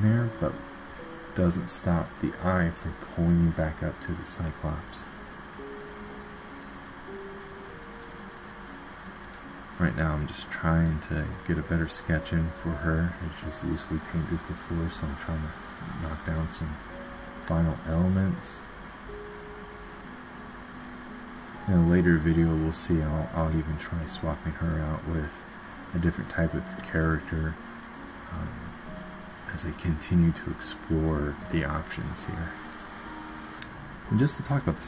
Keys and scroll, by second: 2.4 ctrl+z, 2.8 typing.